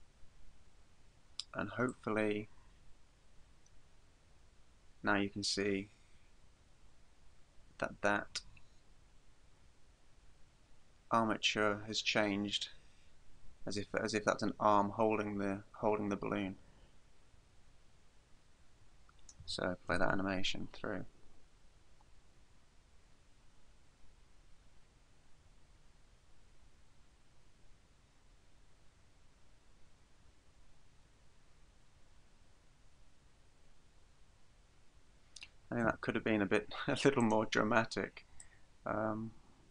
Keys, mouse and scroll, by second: 1.9 click, 20.0 alt+a, 35.9 Escape, 37.3 right click, 38.4 click.